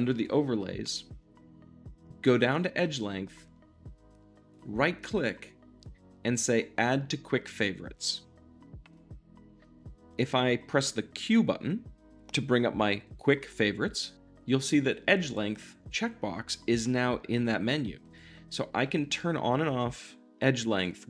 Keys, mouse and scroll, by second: 0.0-4.4 drag, 4.4-8.9 middle drag, 4.4-8.9 right drag, 8.9-18.7 drag, 18.7 q, 19.0 click, 19.5 q, 19.7 click, 20.6 q, 20.8-21.0 drag.